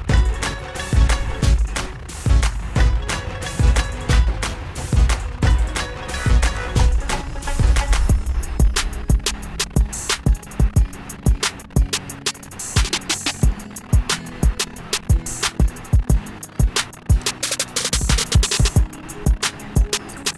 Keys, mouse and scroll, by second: 2.2 alt+click, 10.7 click, 13.8 click, 17.4 click.